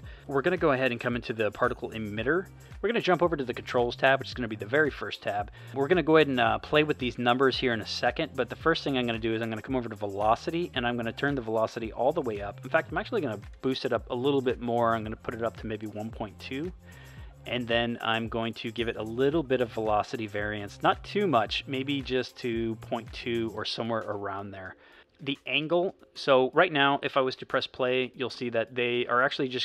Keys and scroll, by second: 13.5 BackSpace, 14.4 2, 27.4 space.